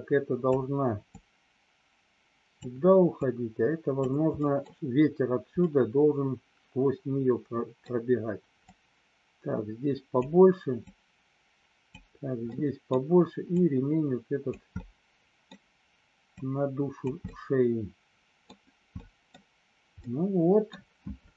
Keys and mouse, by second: 1.1-2.6 drag, 3.1 click, 4.2 middle click, 5.6-7.7 middle drag, 8.7-10.2 drag, 10.8 click, 12.5 middle click, 13.6 click, 14.8 middle click, 16.4 click, 17.2-18.5 middle drag, 18.8 middle click, 20.0 middle click.